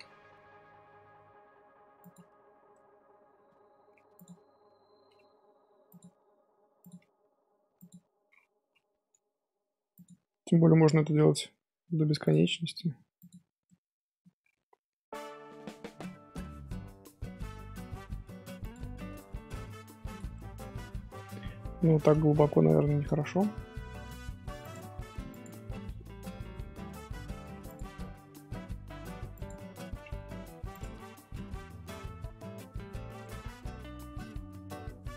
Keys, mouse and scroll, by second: 2.4 scroll down 1, 2.7-3.5 middle drag, 3.5 scroll up 2, 3.7 Tab, 4.1 click, 13.6-14.9 middle drag, 18.7 Tab, 19.0 scroll down 1, 19.1-20.0 middle drag, 20.0 click, 20.3-21.4 middle drag, 21.4 Tab, 22.2 scroll up 2, 22.6 shift+middle click, 23.3 3, 24.6 alt+click, 25.3 alt+click, 27.3 ctrl+r, 30.1 Tab, 30.3 3, 30.7 alt+click, 31.7 ctrl+KP_Add, 33.2 middle click, 33.8-34.8 scroll down 1, 34.8 middle click.